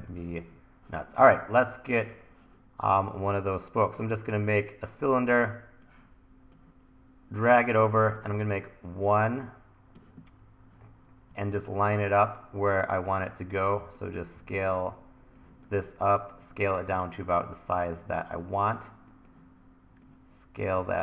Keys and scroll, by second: 0.0 e, 8.4 t, 11.3 1, 14.4 e, 15.5 t, 16.9 e, 20.8 e.